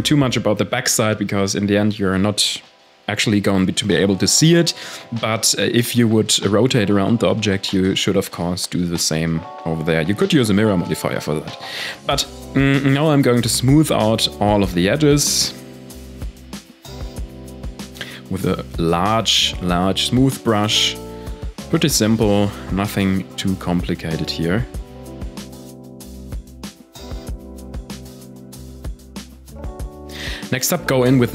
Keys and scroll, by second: 18.8 shift+d, 20.2 shift+d, 20.7 m, 21.5 Return, 22.3 ctrl+s.